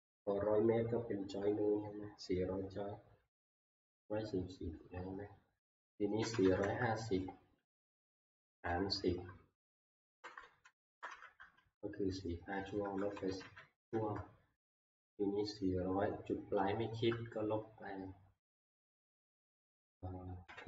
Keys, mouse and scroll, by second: 6.0-7.1 typing, 8.3 *, 9.8-11.1 typing, 12.6-14.3 typing, 15.9-16.6 typing, 20.5-20.6 typing.